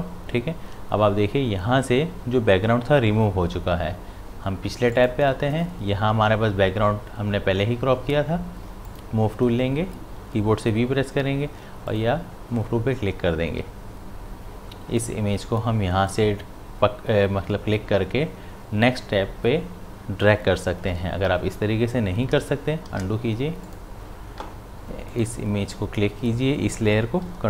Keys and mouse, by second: 4.9 click, 8.9 click, 11.9 click, 13.5 v, 15.0-22.9 drag, 22.9 ctrl+z, 23.6 click.